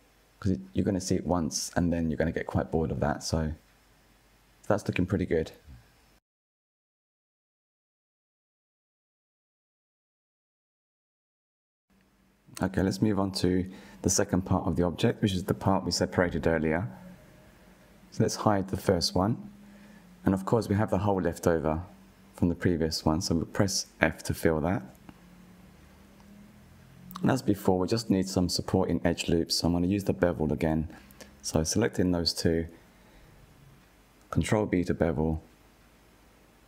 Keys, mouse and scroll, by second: 0.6-2.1 drag, 2.1 Tab, 2.5 click, 2.8-3.4 scroll down 4, 3.4-9.0 middle drag, 9.0 KP_1, 9.9 scroll down 2, 10.6-11.8 shift+middle drag, 11.8 scroll up 1, 14.0 click, 15.6 click, 16.8-20.7 middle drag, 20.7 click, 21.3-22.1 middle drag, 22.1 Tab, 23.1 2, 23.7 alt+click, 24.7 f, 25.2 click, 26.1 KP_1, 26.9-27.3 scroll up 3, 27.3-28.4 shift+middle drag, 28.4 click, 28.9 shift+middle click, 29.4-30.6 scroll up 2, 31.5 click, 33.4 alt+shift+click, 34.8 ctrl+b.